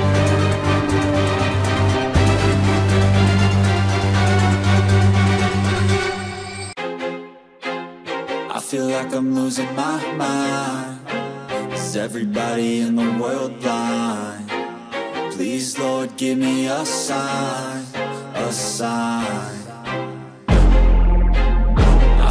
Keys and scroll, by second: 0.1 space, 1.4 space, 3.9 ctrl+-, 4.7 space, 6.7 ], 7.3 ctrl+alt+z, 7.8 ], 8.4 ], 10.8 space, 12.6 ctrl+=, 12.9 space, 13.9 ctrl+=, 14.1 space, 14.7 ctrl+=.